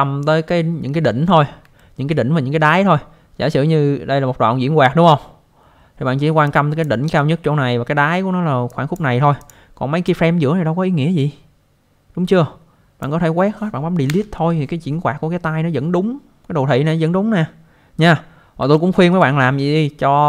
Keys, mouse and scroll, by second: 1.8 alt+middle click, 6.4 click, 8.7 click, 9.4 click, 10.1 click, 14.0 Delete, 18.7 alt+middle click.